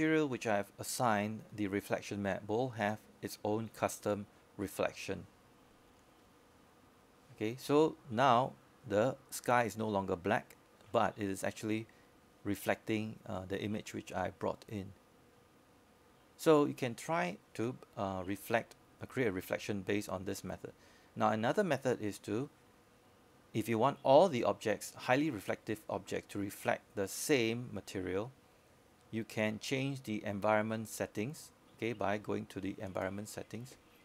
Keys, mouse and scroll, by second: 0.0 click.